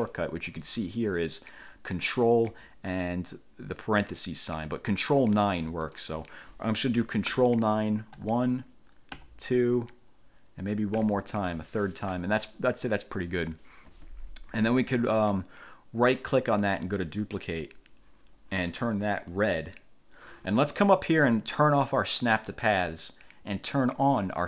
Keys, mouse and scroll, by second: 0.2 click, 6.0 click, 8.4 ctrl+9, 9.4 ctrl+9, 11.2 ctrl+9, 16.2 right click, 17.4 click, 19.5 click, 22.6 click.